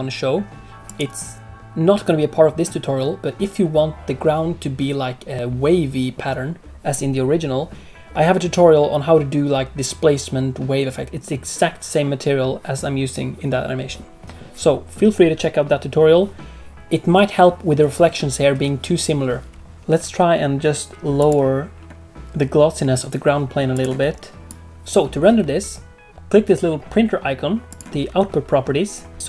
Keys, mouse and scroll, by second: 0.8 click, 21.1 click, 23.7 click, 24.7 ctrl+s, 27.6 click.